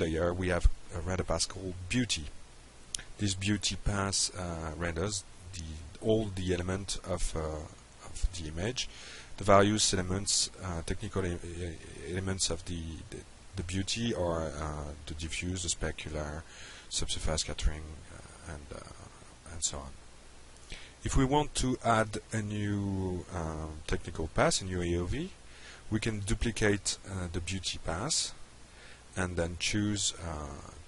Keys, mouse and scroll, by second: 1.4 click, 1.6 F5, 17.3 click, 27.9 click, 29.1 click.